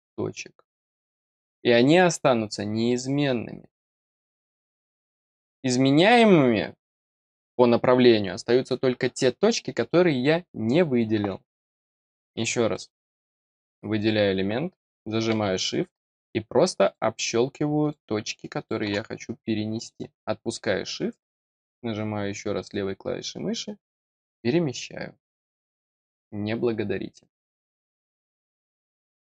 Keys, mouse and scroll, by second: 12.7 middle click, 13.9 click, 15.9 click, 16.8 click, 17.8 click, 18.5 click, 19.7 click.